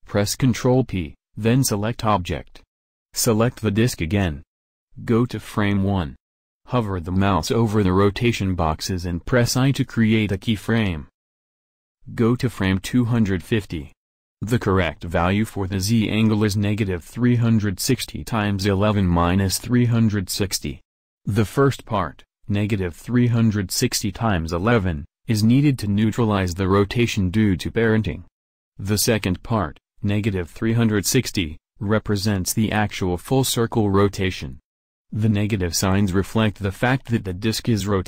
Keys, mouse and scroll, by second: 1.6 ctrl+p, 10.3 i, 16.6 1.